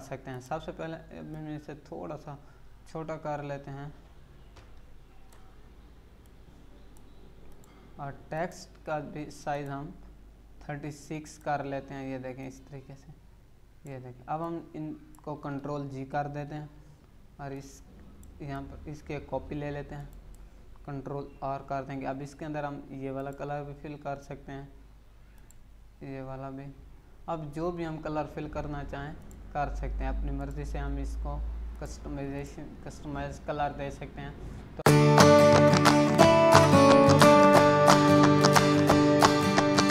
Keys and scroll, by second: 16.3 ctrl+g.